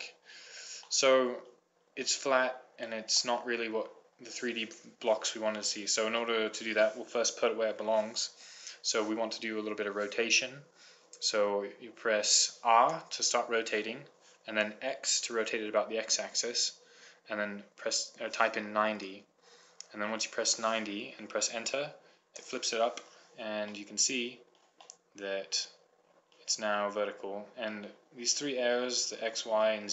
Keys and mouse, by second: 5.2-6.5 middle drag, 8.3 middle click, 13.1 r, 23.9 click, 26.2-29.9 middle drag.